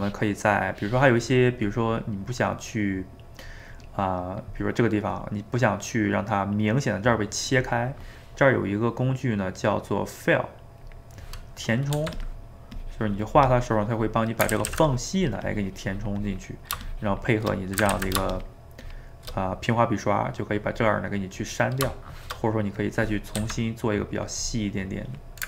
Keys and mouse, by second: 10.8-11.9 drag, 11.9 f, 12.4 middle click, 12.8-14.5 drag, 14.5 ctrl+z, 14.7 ctrl+z, 14.9-17.9 drag, 17.9 ctrl+z, 18.3-19.5 shift+drag, 19.5-22.8 middle drag, 22.8 click, 23.4 f, 24.9 click.